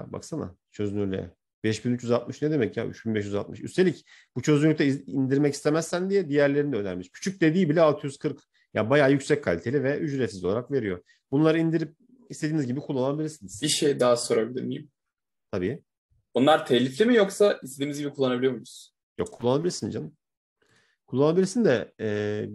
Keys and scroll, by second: 15.5 Escape.